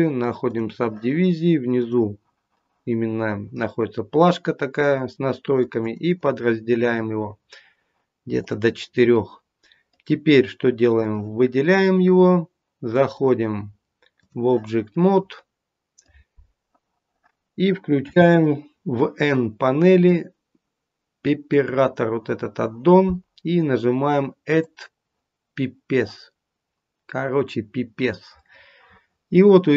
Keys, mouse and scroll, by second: 2.6 click, 5.5 click, 5.8 click, 6.0 click, 8.3 click, 9.1 middle click, 10.9 click, 13.1 click, 14.9 middle click, 17.9 n, 21.4 click, 24.4 click, 28.0 middle click.